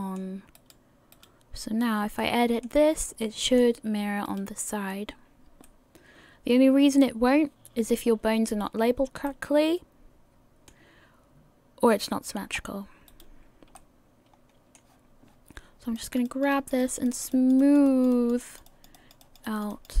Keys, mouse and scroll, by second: 0.8 right click, 1.4 right click, 1.8 scroll down 2, 2.2 middle click, 4.5 right click, 5.6 middle click, 9.3 middle click, 12.4 scroll up 2, 13.3 right click, 13.3-13.8 scroll up 1, 13.8 middle click, 16.0 click, 16.3 click, 16.5 click, 17.3 click, 17.6 click, 18.1 click, 18.4 click, 19.2 click, 19.4 click.